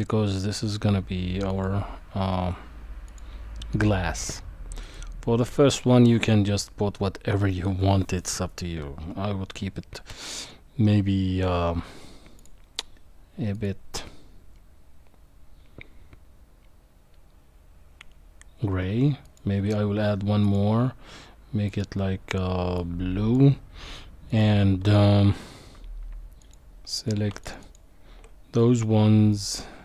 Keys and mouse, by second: 1.6-3.2 drag, 4.8 click, 12.4 click, 19.3 click, 20.4 click, 21.7 click, 24.3 click, 27.4 alt+shift+click, 27.6 alt+shift+click, 29.3-29.8 drag.